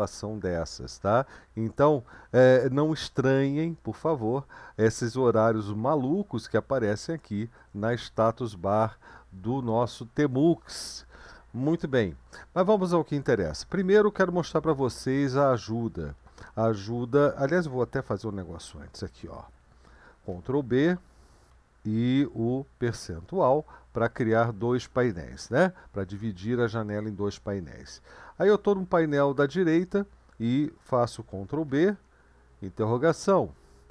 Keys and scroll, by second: 20.3 ctrl+b, 22.9 shift+5, 31.7 ctrl+b, 32.8 Down.